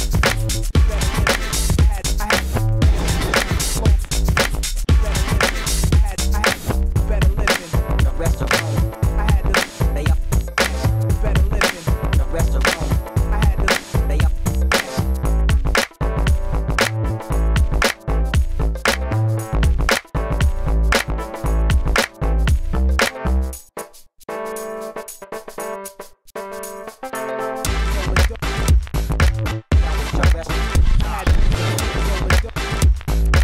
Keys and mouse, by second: 1.2 shift+f, 6.4 f, 6.8 s, 7.0 f, 10.7 f, 11.2 s, 13.4 s, 15.1 f, 16.6 s, 17.2 s, 17.4 f, 18.2 s, 19.5 s, 19.7 s, 20.8 alt+s, 22.2 s, 22.5 f, 22.9 f, 25.0-26.2 middle drag, 26.7-29.0 middle drag, 30.5-31.3 ctrl+z, 31.7 alt+s, 32.9 s, 33.0 f.